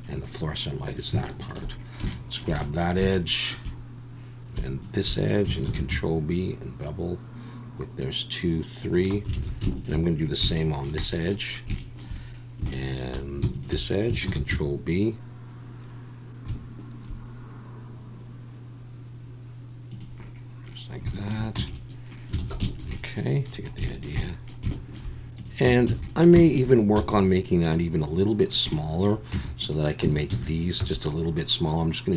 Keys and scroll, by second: 5.7 ctrl+b, 9.3 alt+a, 14.3 ctrl+b, 21.6 Tab, 22.4 alt+a, 25.7 Tab, 25.9 a, 27.0 s, 29.3 Tab, 30.0 Tab, 30.3 a, 30.8 s.